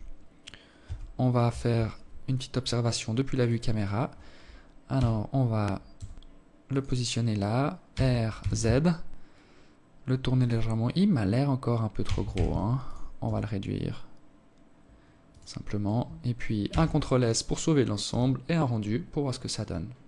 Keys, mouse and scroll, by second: 2.0 right click, 2.3 right click, 3.5 g, 6.5 r, 10.6 r, 11.8 s, 15.3 ctrl+s.